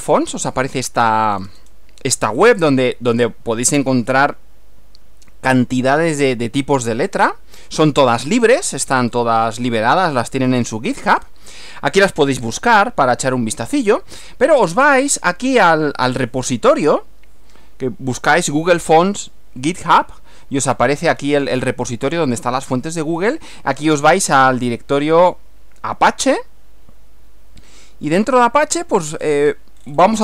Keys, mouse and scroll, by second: 1.4-1.9 scroll down 1, 2.4-2.9 scroll up 2, 3.1-3.4 scroll up 2, 8.8-9.4 scroll down 2, 10.9-11.4 scroll up 1, 12.5 scroll down 2, 13.3 scroll down 2, 15.0 click, 21.2 scroll down 1, 22.2 scroll down 1, 23.2 scroll down 1, 24.6 click, 28.1-28.6 scroll down 1, 29.2-30.2 scroll down 22.